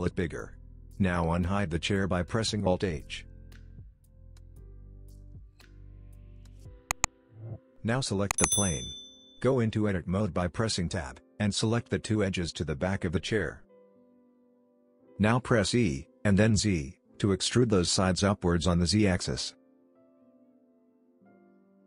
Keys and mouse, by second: 1.3 middle click, 3.1 alt+h, 3.6 middle click, 4.4 middle click, 6.4 click, 6.9 Tab, 7.2 middle click, 8.1 click, 12.8 shift+click, 13.4 middle click, 13.9 middle click, 15.0 e, 19.7 Tab, 19.9 click, 21.1 g.